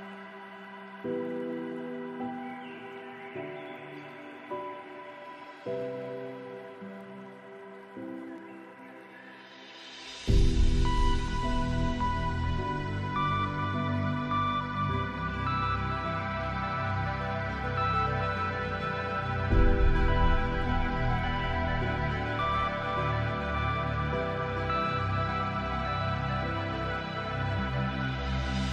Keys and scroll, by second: 20.9 ctrl+d, 21.4 ctrl+space.